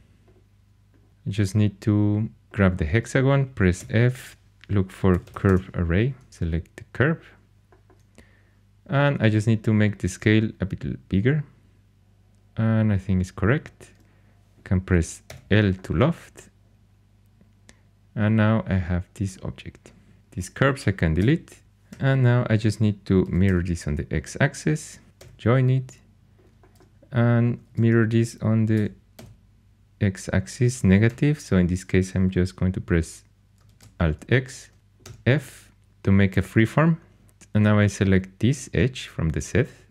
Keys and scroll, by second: 3.7 f, 4.8-6.0 typing, 15.2 i, 21.1 x, 21.9 4, 23.2 alt+x, 23.4 typing, 25.1 j, 27.6 alt+x, 28.5-29.6 typing, 31.0 -, 33.6 alt+x, 35.0 f.